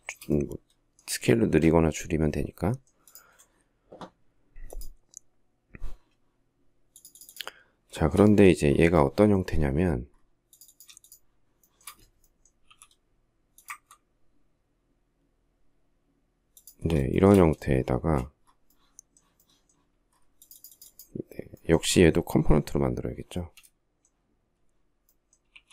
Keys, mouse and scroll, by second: 7.3 shift+middle click, 10.2 shift+click, 10.8 shift+middle click, 11.9 m, 16.4 shift+middle click, 17.2 space, 24.7 q.